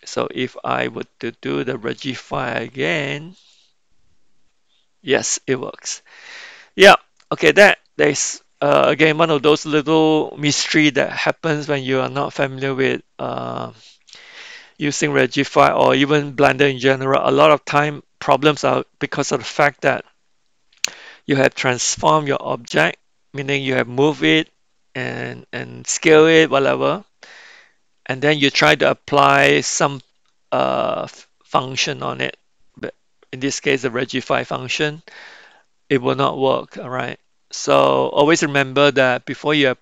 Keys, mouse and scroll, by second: 3.5 click, 5.5 middle click, 7.2 middle click.